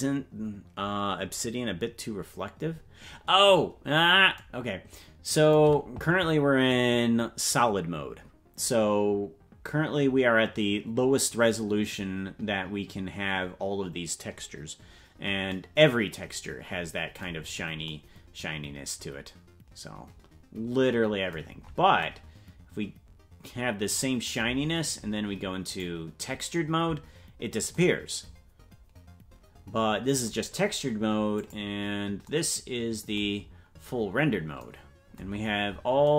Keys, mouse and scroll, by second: 3.7-4.3 scroll down 1, 4.3 scroll down 2, 17.3-17.8 scroll down 4, 21.5-22.7 scroll up 4, 25.8 click, 31.3 click, 33.3-34.6 scroll down 10, 35.3-36.0 scroll up 9.